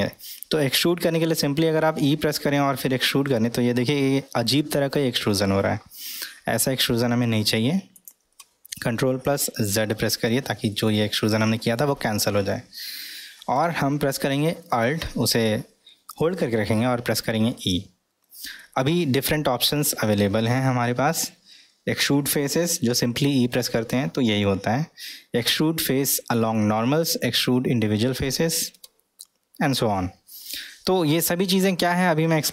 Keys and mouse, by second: 1.8 e, 10.7-14.0 ctrl+middle drag.